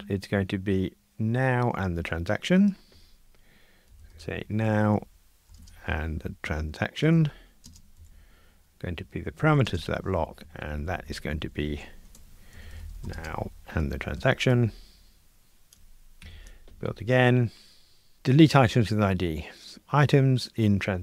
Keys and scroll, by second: 11.7 alt+shift+Left, 14.5 Escape, 16.3 super+F9.